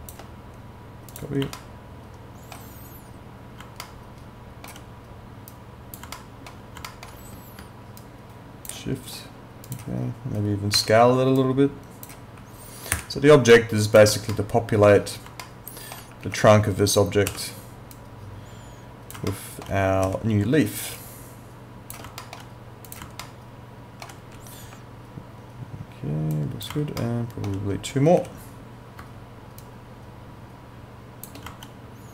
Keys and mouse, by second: 1.6 alt+middle click, 3.8 alt+middle click, 5.5 click, 6.2 alt+middle click, 6.9 alt+middle click, 8.0 shift+click, 10.8 r, 11.4 click, 13.0 e, 13.5 click, 14.3 alt+middle click, 15.4 alt+middle click, 16.2 q, 17.3 w, 18.0 click, 19.3 alt+middle click, 20.0 e, 21.0 shift+click, 22.2 alt+middle click, 22.9 click, 23.2 alt+middle click, 24.2 e, 24.6 w, 26.4 click, 27.0 alt+middle click, 28.2 e, 29.6 shift+click.